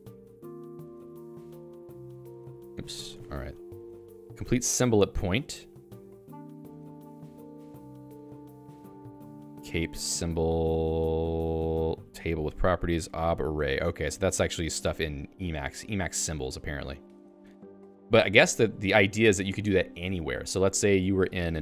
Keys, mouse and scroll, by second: 1.2 l, 1.5 k, 2.9 ctrl+g, 4.1 Return, 5.6 j, 5.8 ctrl+d, 6.7 ctrl+d, 6.8 ctrl+d, 8.2-16.9 typing, 18.0-19.4 typing, 19.6 Escape, 20.1 ctrl+s.